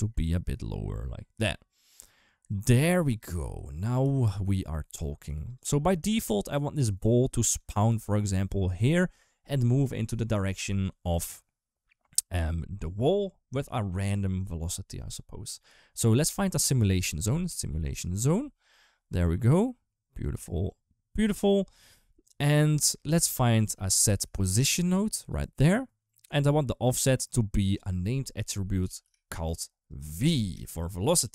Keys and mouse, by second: 3.4 click, 3.8 g, 5.1 g, 7.4 click, 7.7 g, 16.4 shift+a, 19.2 click, 19.4 click, 20.6 click, 22.1 click, 22.7 g, 23.4 shift+a, 27.4-29.3 drag, 29.7 click.